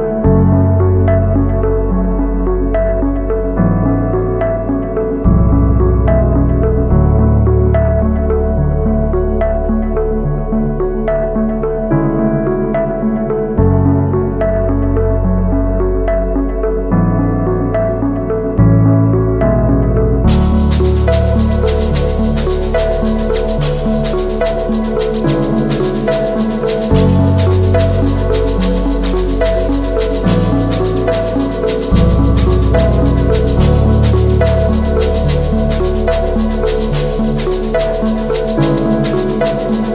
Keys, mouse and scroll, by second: 0.1 shift+click, 8.4 ctrl+z, 20.9 double click, 30.6-31.9 typing, 33.0 double click, 34.7 typing, 35.1 double click, 37.1 typing, 37.6 double click.